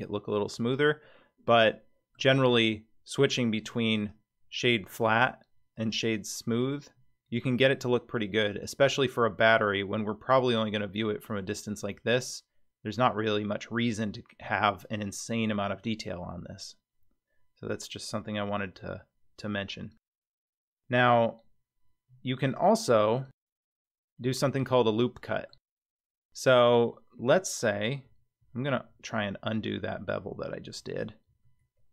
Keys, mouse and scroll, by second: 1.7 middle click, 2.2 Tab, 3.2 Tab, 3.6 Tab, 3.9-5.0 drag, 3.9 right click, 5.7-6.6 drag, 5.7 right click, 7.7-9.4 scroll down 15, 8.5 click, 9.4-11.4 middle drag, 9.4 scroll down 1, 14.4-18.7 scroll up 19, 22.0-22.4 scroll down 3, 22.4 click, 23.0 scroll down 1, 23.1 Tab, 23.8-25.5 middle drag, 25.9-26.6 scroll up 4, 28.4 ctrl+z, 28.9 ctrl+z, 29.2 ctrl+z, 29.5 ctrl+z, 29.9 ctrl+z, 30.3 ctrl+z, 30.8 ctrl+z, 31.3 ctrl+z, 31.6 ctrl+z.